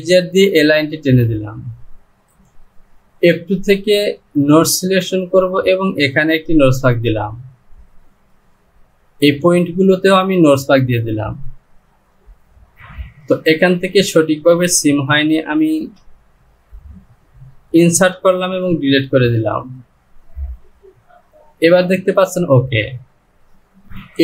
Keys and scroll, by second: 12.7 Return, 15.7 shift+=, 18.4 Delete, 21.7 Home.